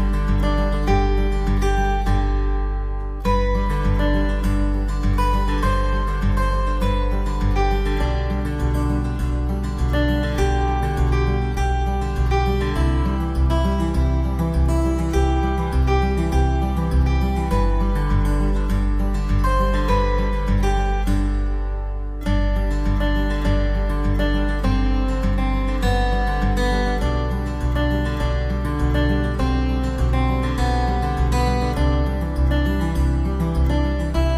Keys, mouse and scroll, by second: 1.2 click, 3.1 click, 4.0 right click, 5.2 shift+s, 8.2 Tab, 9.1 right click, 10.6 click, 11.7 click, 12.6 click, 13.3 middle click, 14.9 shift+a, 18.1 shift+a, 21.4 s, 22.6-23.0 scroll down 3, 22.8 middle click, 25.2 r, 33.9 KP_7.